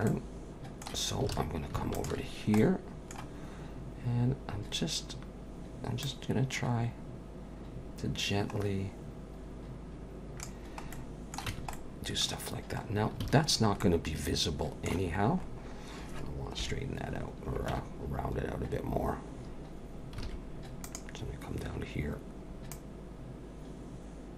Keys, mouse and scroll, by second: 0.1 middle click, 1.3 alt+a, 1.9 alt+shift+click, 2.3-3.1 scroll down 2, 2.6 middle click, 6.0 click, 10.9 middle click, 11.5 Tab, 11.7 middle click, 12.4-14.5 scroll down 7, 13.2 alt+a, 13.8 middle click, 15.1-15.8 scroll up 7, 16.6 KP_1, 17.2-17.7 scroll up 1, 17.7 Tab, 17.7-18.5 scroll up 1, 20.2 alt+a, 20.8 click, 22.7 click.